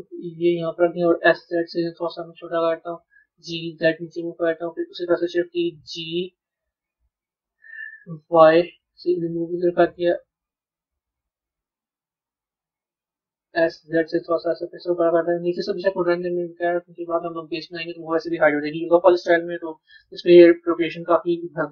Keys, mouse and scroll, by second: 5.2 shift+d, 16.0-18.5 middle drag, 18.5 KP_3.